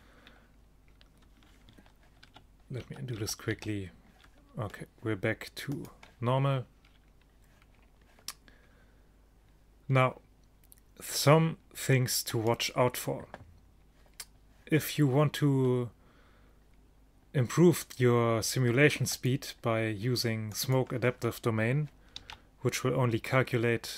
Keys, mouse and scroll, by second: 2.3 ctrl+z, 2.9 ctrl+z, 3.2 ctrl+z, 3.6 ctrl+z, 5.8-7.1 drag, 12.4-14.1 right drag, 19.9-22.3 drag, 22.3 alt+a.